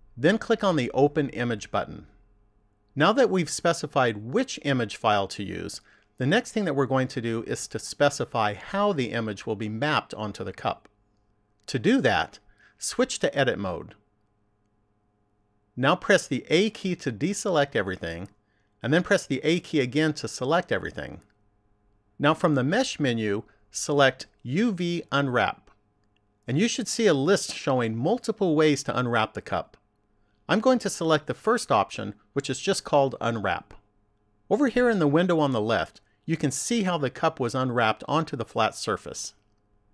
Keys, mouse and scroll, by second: 1.4 click, 13.3 click, 17.0 a, 18.8 a, 22.4 click.